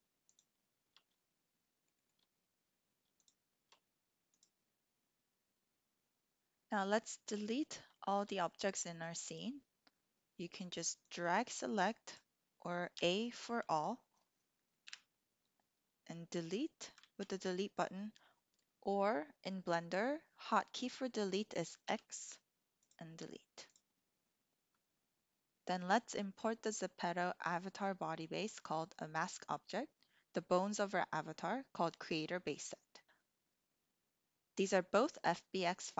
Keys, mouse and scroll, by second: 1.2 shift+click, 2.0 shift+click, 3.2 shift+click, 6.4 Tab, 6.5-7.3 drag, 7.9 shift+click, 8.8-11.7 drag, 12.1 click, 12.9 a, 14.7 Delete, 17.2 ctrl+z, 21.9 x, 22.9 typing, 23.6 click.